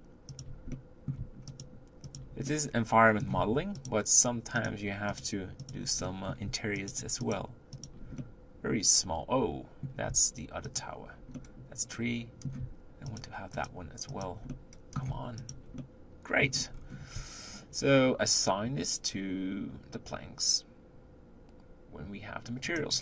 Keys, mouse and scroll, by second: 3.9 shift+click, 4.7 shift+click, 5.2 shift+click, 8.6-23.0 middle drag.